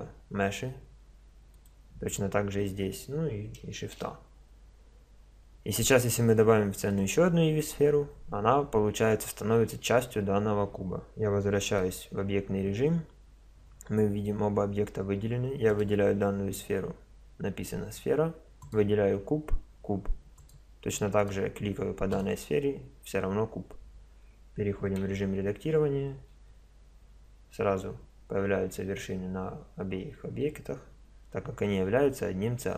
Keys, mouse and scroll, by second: 2.9 click, 3.8 shift+a, 11.8 Tab, 15.7-17.6 drag, 18.6-20.3 drag, 20.4-23.8 drag, 25.0 Tab, 26.3 a.